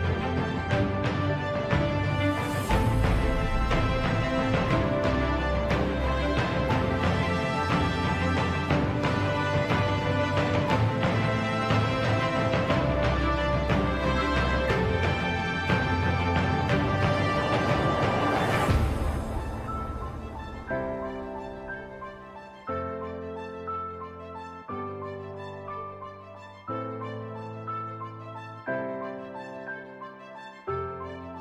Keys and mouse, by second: 1.9 s, 4.8 s, 9.7 ctrl+right click, 11.7 KP_3, 15.1 ctrl+r, 18.5 middle click, 19.5 middle click, 20.7 3, 21.5 click, 22.2 middle click, 23.6 middle click, 26.0 KP_3, 27.5 alt+e.